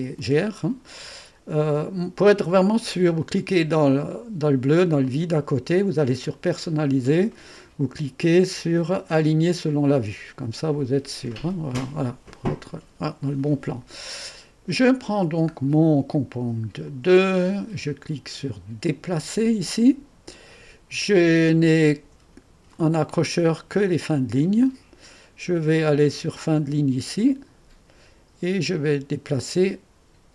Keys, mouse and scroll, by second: 0.0-0.6 typing, 3.2-4.3 drag, 5.0-7.0 drag, 9.6 click, 15.0-16.8 scroll down 4, 16.8 click, 18.8 click, 22.7 click, 27.2 click.